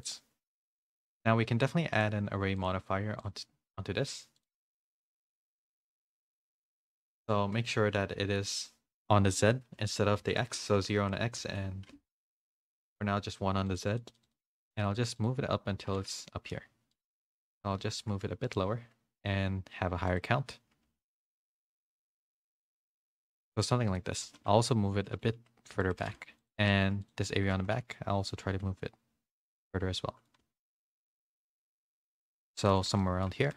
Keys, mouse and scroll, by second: 0.0 click, 0.9 Tab, 0.9 z, 0.9 g, 0.9 a, 1.0 middle click, 2.5 click, 5.1 click, 8.6-12.1 drag, 10.3 BackSpace, 11.0 Tab, 13.7 click, 14.0 click, 14.2 click, 14.4 click, 14.5 click, 14.7 click, 14.9 click, 15.1 click, 16.2 middle click, 16.2 a, 16.9 click, 17.2 middle click, 17.6 g, 20.1 click, 22.0 a, 22.3 middle click, 22.3 a, 23.9 middle click, 23.9 a, 24.2 g, 25.9 a, 26.6 Tab, 26.8 3, 27.0 click, 27.5 g, 29.6 middle click, 30.3 g, 32.5 Tab, 32.7 a, 33.0 middle click, 33.0 a, 33.4 shift+middle click.